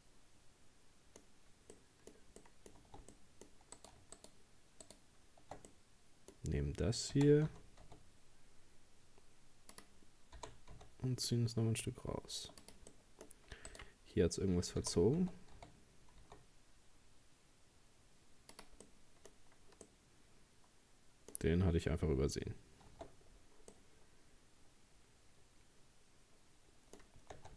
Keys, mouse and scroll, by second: 1.3 scroll up 1, 1.8-2.9 middle drag, 2.9 Tab, 3.1 middle click, 3.8 right click, 4.2 shift+right click, 4.9 shift+right click, 5.7-7.2 middle drag, 7.2 r, 10.4 g, 12.9 middle click, 13.7 right click, 14.8 g, 18.9 middle click, 19.3-19.9 scroll up 1, 19.9-22.9 middle drag, 23.0 Tab, 23.3-23.7 scroll down 5, 23.7-26.7 middle drag, 27.1 scroll up 1, 27.4 Tab.